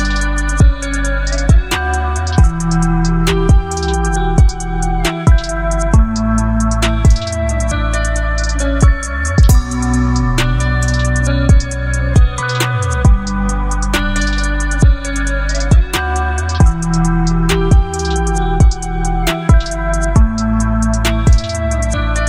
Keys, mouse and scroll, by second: 1.8 shift+t, 3.7 click, 4.9-7.4 alt+drag, 9.2 shift+h, 11.3 click, 17.3 click.